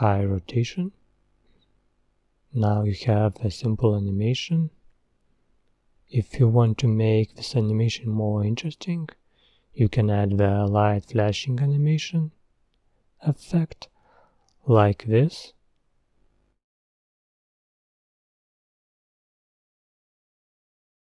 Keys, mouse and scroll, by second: 3.4-7.2 drag, 8.5 click, 19.5-21.0 drag.